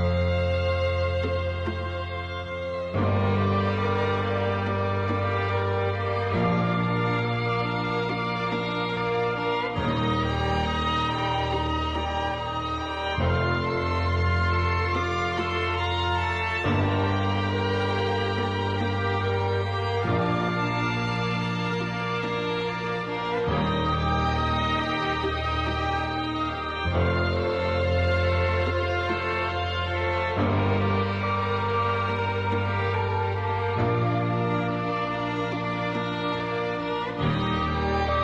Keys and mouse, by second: 3.1 shift+middle click, 3.6 click, 4.1 click, 5.0 shift+middle click, 6.0 click, 7.3 click, 8.1 click, 8.4 click, 9.1 click, 9.4 click, 10.3 shift+middle click, 10.6 middle click, 11.9 shift+middle click, 12.3 middle click, 13.1 shift+middle click, 13.4 middle click, 13.8 shift+middle click, 15.8 g, 17.4 g, 18.3 middle click, 19.3 middle click, 19.5 middle click, 20.0 Tab, 20.6 middle click, 21.1 shift+middle click, 22.2 shift+middle click, 25.4 shift+middle click, 29.3 shift+middle click, 30.3 shift+middle click, 31.4 ctrl+r, 33.7 shift+middle click, 36.4 click, 37.3 g.